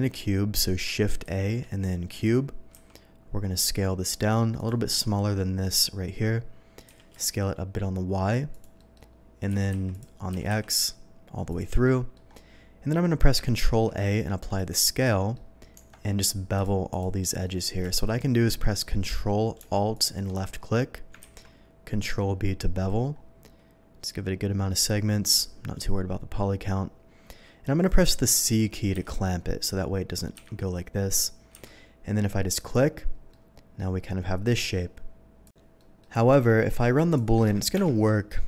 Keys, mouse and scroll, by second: 1.2 shift+a, 2.1 click, 2.7 s, 4.5 click, 6.9 s, 7.1 y, 8.5 click, 8.8-9.1 middle drag, 9.1 scroll down 1, 9.1 scroll up 1, 9.5 s, 9.8 x, 9.9 click, 10.3 s, 10.5 x, 11.5 click, 11.8-12.1 middle drag, 13.3 ctrl+middle click, 14.6 click, 15.1 middle click, 15.8 Tab, 16.5 click, 16.9 click, 17.4 middle click, 17.9 alt+a, 19.9 ctrl+alt+click, 21.2 ctrl+b, 22.9 middle click, 24.3 scroll up 1, 28.9 c, 32.6 click, 33.3-34.5 middle drag, 35.4 click, 35.8 middle click, 36.3 Tab, 36.7 middle click, 37.1 shift+click, 37.7 ctrl+KP_Subtract, 38.3-38.4 ctrl+middle drag.